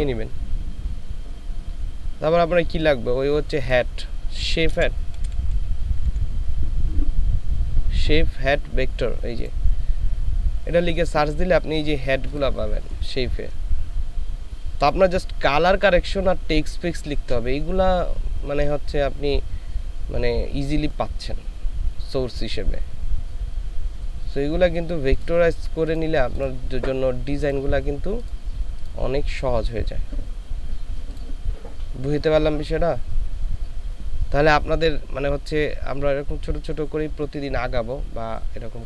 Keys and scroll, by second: 4.7 c, 5.2 h, 6.1 e.